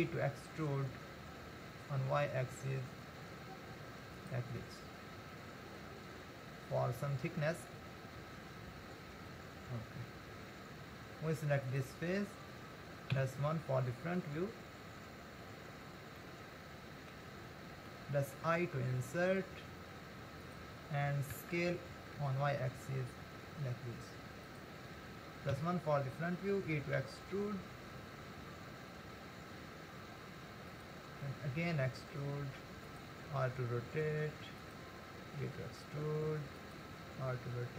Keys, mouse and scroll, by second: 0.0 e, 4.6-7.7 middle drag, 9.5-10.5 scroll up 2, 10.6 scroll up 3, 11.6 click, 13.2 KP_1, 14.3-14.9 scroll up 2, 16.2-18.4 middle drag, 18.4 i, 25.5 KP_1, 27.0 e, 31.6 e, 33.4 r, 35.4 e, 37.3 r.